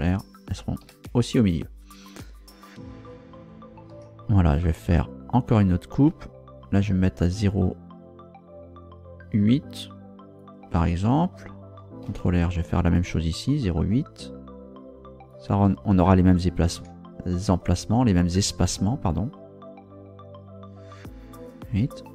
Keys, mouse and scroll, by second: 0.1 ctrl+click, 0.8 Escape, 3.9 ctrl+r, 5.5 click, 10.4 ctrl+click, 12.1 ctrl+r, 12.6 ctrl+click, 15.3 ctrl+click, 16.7 ctrl+r, 17.4 click, 21.4 ctrl+click.